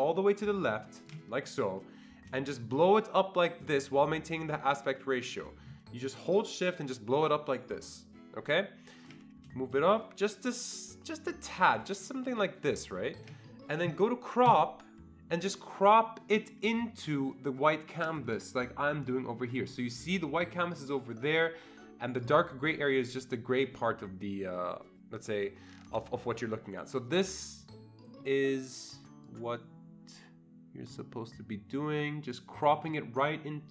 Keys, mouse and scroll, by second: 2.9-9.1 shift+drag, 10.0-13.5 shift+drag, 16.7-28.2 shift+drag, 29.6-31.5 drag.